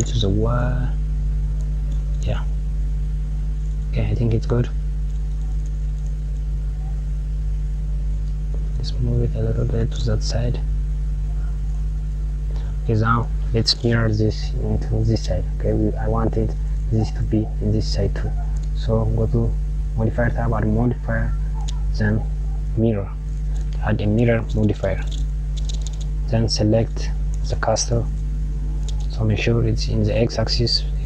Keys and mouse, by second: 2.0 click, 3.7 click, 8.6 click, 9.2 g, 11.8 click, 13.0 click, 19.7-22.3 drag, 26.2 click.